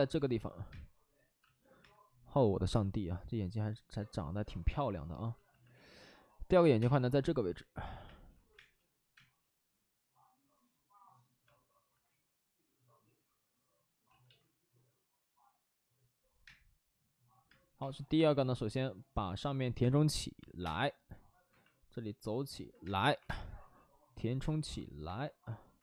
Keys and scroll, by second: 0.6 space, 1.4 space, 1.8 3, 2.6 space, 5.0 space, 6.6 5, 6.7 space, 8.0 space, 8.3 ctrl+z, 8.5 space, 9.1 space, 11.4 space, 11.8 ctrl+z, 14.1 ctrl+z, 14.2 ctrl+z, 15.0 ctrl+z, 16.4 space, 17.4 space, 17.8 1, 19.7 space, 20.5 3, 21.4 space, 21.4 2, 22.8 space, 23.1 1, 23.2 space, 24.3 space, 25.0 2, 25.7 ctrl+z.